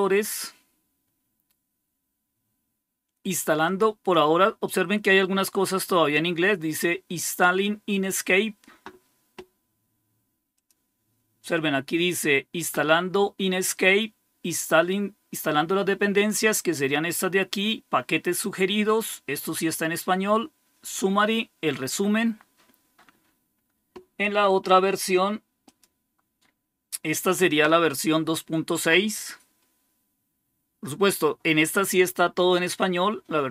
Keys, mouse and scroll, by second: 10.4 click, 25.5-28.8 drag.